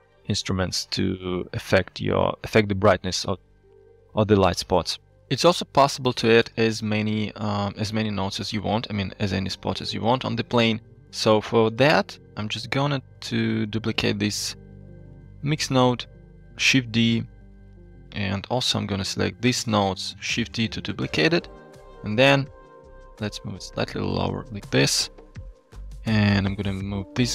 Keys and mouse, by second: 0.6 click, 6.0 n, 6.7 shift+middle click, 8.4 shift+click, 10.0 click, 12.2-12.6 drag, 12.9 g, 13.8 click, 15.5 shift+g, 16.7 shift+d, 17.9 shift+click, 18.5-19.0 drag, 20.6 shift+d, 22.2 shift+click, 22.8 drag, 23.2 click, 23.8 g, 24.8 shift+click, 26.3 drag, 27.1 g.